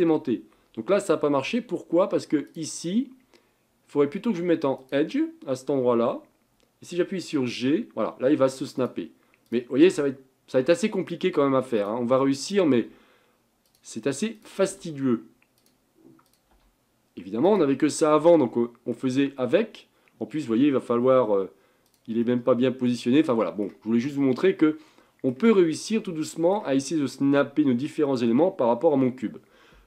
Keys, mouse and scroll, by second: 2.5-5.6 drag, 7.4 g, 9.5 click, 10.5 g, 12.4 click, 12.8 g, 14.4 click, 14.7 g, 16.3 click, 16.5 g, 17.9-20.5 middle drag, 20.5 g, 22.2-23.9 middle drag, 23.9-24.4 scroll down 2, 24.4-29.2 middle drag.